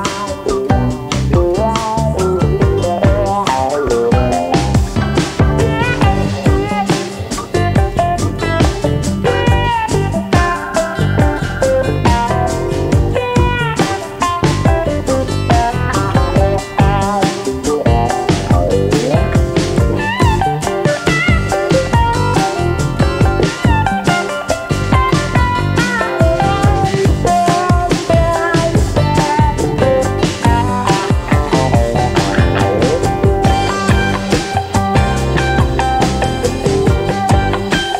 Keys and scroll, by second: 5.2 9, 6.3 Return, 11.3 9, 11.7 Return, 13.1 c, 15.8 9, 16.5 Return, 26.0-27.1 typing, 37.3-37.9 typing.